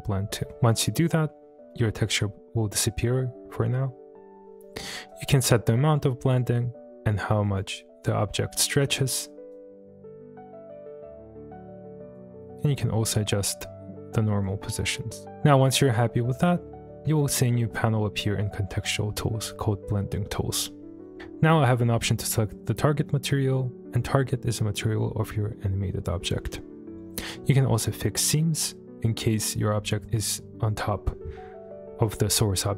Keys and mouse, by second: 0.5 click, 0.5-3.0 middle drag, 5.1-6.0 drag, 6.4-7.5 drag, 7.8-8.4 middle drag, 9.5-12.2 drag, 12.7-14.5 drag, 14.9-15.4 drag.